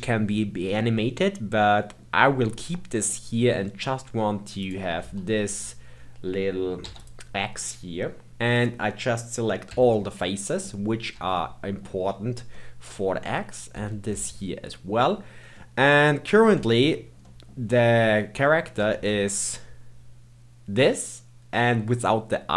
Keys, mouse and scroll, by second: 1.6-4.1 middle drag, 4.1-4.6 scroll up 2, 4.6 click, 5.0 Tab, 5.5 click, 6.8 3, 7.0 click, 8.3 a, 8.5 click, 9.7 l, 10.1-11.1 middle drag, 11.1 l, 11.4-13.7 middle drag, 13.7 l, 14.2-16.5 middle drag, 16.5 Tab, 16.9-17.2 scroll down 2, 17.2-18.8 middle drag, 18.8 g.